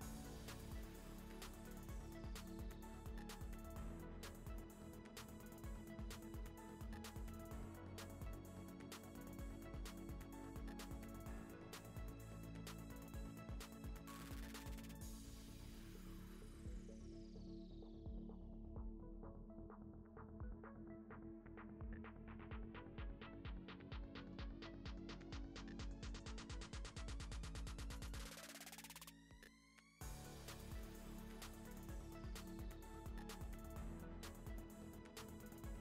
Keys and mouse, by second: 0.5 Tab, 1.4 ctrl+s, 2.4 click, 3.5 click, 4.1 ctrl+s, 4.5 click, 4.8 ctrl+s, 5.3-6.6 drag, 7.5 click, 8.1 ctrl+v, 8.3 click, 11.7 middle click, 13.3 click, 17.2 click, 17.7 click, 18.3 ctrl+s, 18.7 click, 19.5 click, 19.9 click, 21.1 click, 21.4 click, 21.6 click, 21.8 click, 22.4 click, 23.1 click, 24.3 click, 25.0 click, 25.2 click, 25.7 click, 25.9 click, 26.6 click, 27.9 click, 28.1 click, 28.3 click, 28.9 click, 29.0 click, 29.3 click, 30.8 click, 32.0 click, 32.1 ctrl+s, 32.7 click, 34.4 Tab, 34.7 Tab, 34.9 middle click.